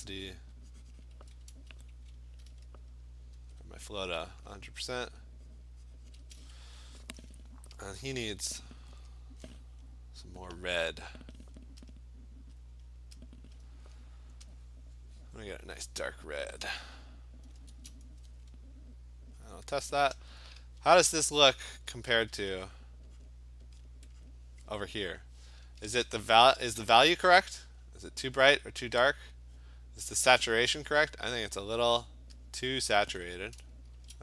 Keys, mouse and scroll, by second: 0.4 click, 1.1 click, 3.4 ), 4.6 click, 6.2 click, 10.7 click, 11.1 click, 11.9 click, 12.9 click, 13.6 click, 15.8 click, 17.6 click, 17.7 Return, 19.2 click, 19.5 click, 20.8-22.5 typing, 23.3 click, 23.9 click, 24.3 click, 30.7 click, 32.6 click, 34.0 Return.